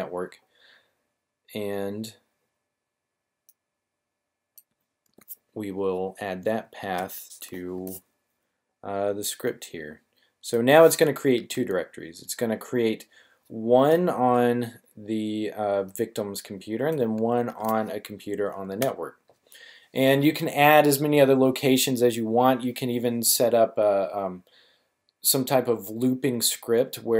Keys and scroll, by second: 5.0 super+v, 6.9 \, 7.8 c, 11.3 super+v, 13.8 \, 17.4 super+v, 18.7 \.